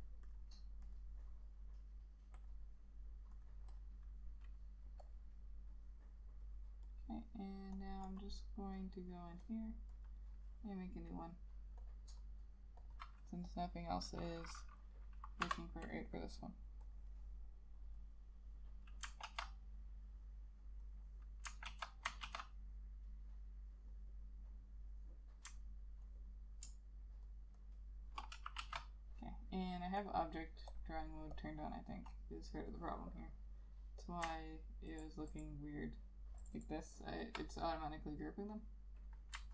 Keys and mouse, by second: 3.8 double click, 8.2 double click, 16.2 F7, 19.4 ctrl+z, 21.8 ctrl+z, 22.4 ctrl+z, 26.2 ctrl+click, 27.4 ctrl+shift+click, 28.4 ctrl+z, 28.7 ctrl+z, 35.0 ctrl+click, 36.5 ctrl+click.